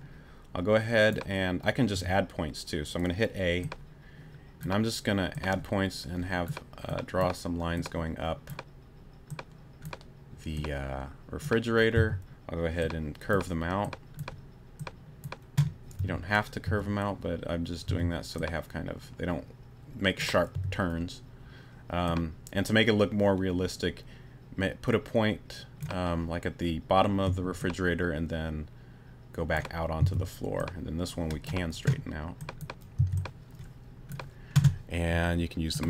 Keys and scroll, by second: 1.9 a, 11.9 c, 16.0 t, 16.6 a, 17.9 t, 20.5 t, 27.3 a, 30.0 c, 33.0 c.